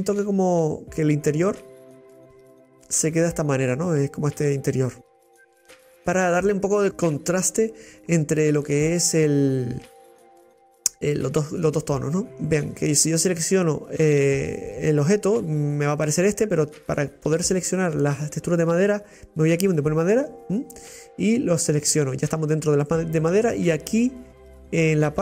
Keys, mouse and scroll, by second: 5.9 scroll down 2, 6.1-8.2 middle drag, 8.2 scroll down 2, 8.4-11.6 middle drag, 12.3-19.8 middle drag, 19.8 click, 21.2 scroll up 1, 21.7-25.2 middle drag.